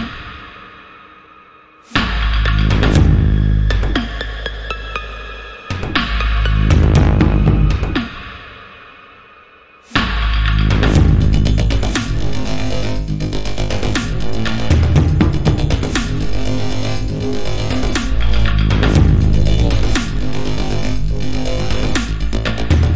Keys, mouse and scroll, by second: 1.4 click, 1.9 l, 2.3 click, 7.7 click, 10.6 a, 11.1 click, 13.6 i, 14.0 click, 14.3 a, 15.3 click, 15.6 i, 16.6 click, 16.8 a, 17.3 click, 19.3 i, 21.9 a, 22.1 click.